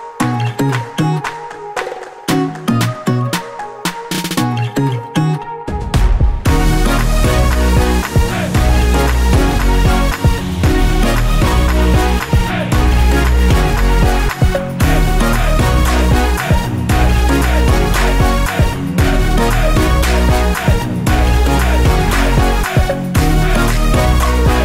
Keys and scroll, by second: 4.2 Return, 10.7 Return, 12.9 F7.